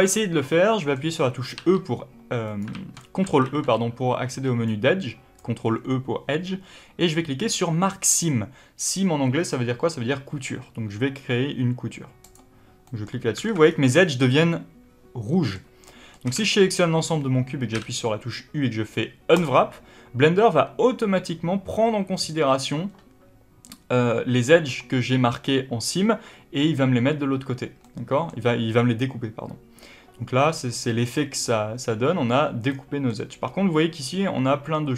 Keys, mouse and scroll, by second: 1.5 e, 2.5 right click, 2.6 ctrl+z, 12.8-16.1 middle drag, 13.3 alt+a, 13.5 scroll down 2, 15.5 scroll up 2, 16.1 a, 17.1 scroll up 1, 17.7 u, 27.7 middle click.